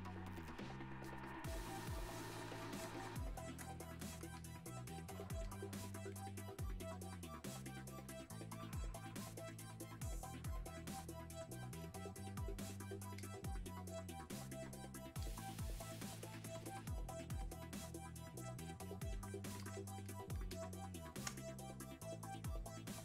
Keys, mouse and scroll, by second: 13.3 click, 21.4 space, 22.3 click, 22.9 space.